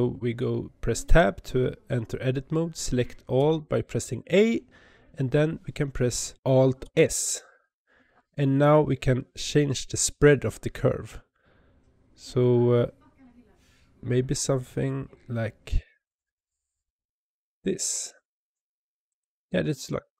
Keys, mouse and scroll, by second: 0.9 Tab, 3.2 a, 6.7 alt+s, 19.0 click.